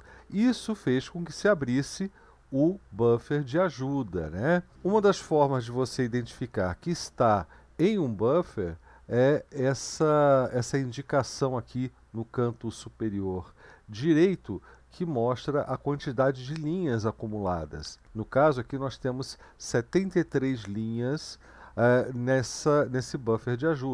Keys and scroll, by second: 3.8 Up, 3.8 Right, 4.5-4.9 Down, 4.9 Up, 7.8 Right, 8.4 Right, 8.5-8.9 Right, 9.5 Left, 9.7 Left, 9.9 Left, 10.2 Left, 22.5-23.9 Down.